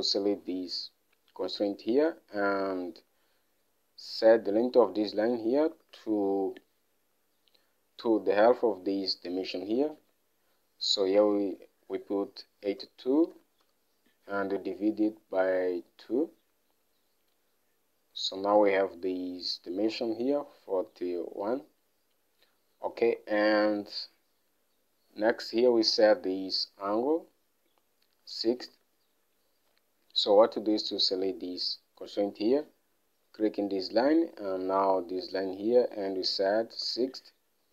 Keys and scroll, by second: 6.2 alt+Tab, 10.5 alt+Tab, 12.4-14.0 typing, 23.4 alt+Tab, 29.2 alt+Tab, 37.2 Return.